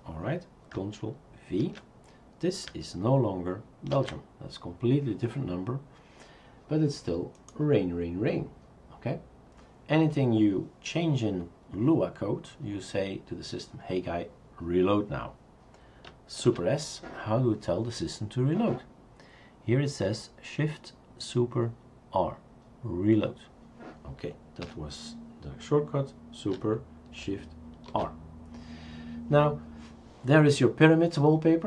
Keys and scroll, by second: 1.6 ctrl+v, 3.9 ctrl+s, 16.5 super+s, 24.6 Escape, 27.9 shift+super+r, 28.7 shift+super+r.